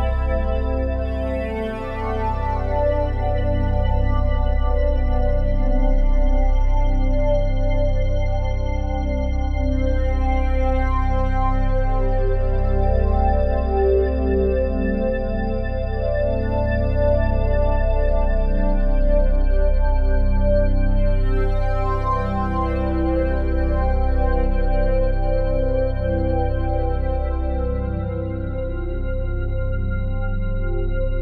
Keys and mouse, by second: 0.6 alt+click, 1.1 g, 1.4 y, 3.2 Page_Up, 3.4 Page_Up, 3.7 Page_Up, 3.8 Page_Up, 4.0 Page_Up, 4.2 Page_Up, 7.0 click, 7.5 alt+click, 8.6 ctrl+alt+click, 8.9 click, 9.6-11.9 drag, 12.1-14.2 alt+drag, 14.2 g, 15.2 Page_Down, 15.4 Page_Down, 15.7 Page_Down, 15.8 Page_Down, 16.0 Page_Down, 16.1 Page_Down, 16.3 Page_Down, 16.4 Page_Down, 16.6 Page_Down, 16.7 Page_Down, 16.9 Page_Down, 17.0 Page_Down, 18.3 y, 21.1 Escape, 21.9-24.0 ctrl+alt+drag, 24.2-25.4 alt+drag, 25.9 alt+click, 26.8 click, 27.5 alt+click, 29.2-31.2 alt+shift+drag.